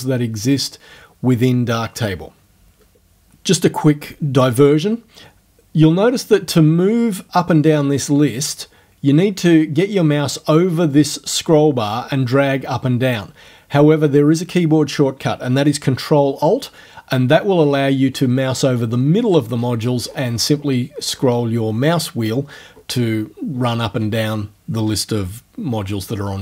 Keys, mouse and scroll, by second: 0.5 click, 11.0-13.9 drag, 17.2-18.7 ctrl+alt+scroll down 2, 18.9-19.3 ctrl+alt+scroll down 1, 19.3-20.8 ctrl+alt+scroll up 1, 21.0-22.2 ctrl+alt+scroll down 2, 22.5-23.3 ctrl+alt+scroll up 3.